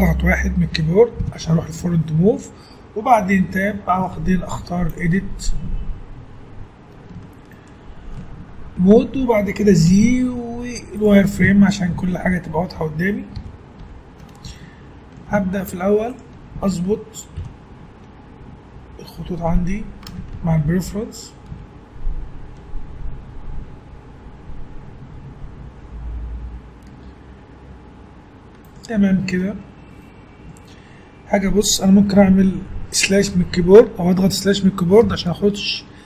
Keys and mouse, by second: 1.2 KP_1, 3.4 Tab, 9.9 z, 13.4 t, 13.8 n, 15.3-16.9 drag, 17.4 ctrl+l, 19.5 h, 20.4 ctrl+z, 21.5 g, 30.2-31.3 middle drag, 35.0 KP_Divide.